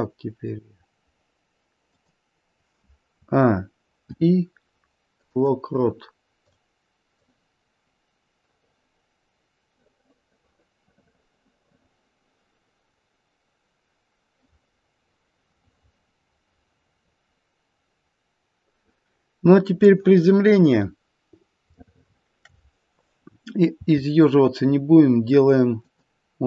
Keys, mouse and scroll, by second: 3.1-4.0 a, 4.0 i, 6.5 click, 7.2 click, 20.7-21.8 scroll up 1, 21.8 shift+middle click, 21.8-23.1 scroll up 1, 23.7 r.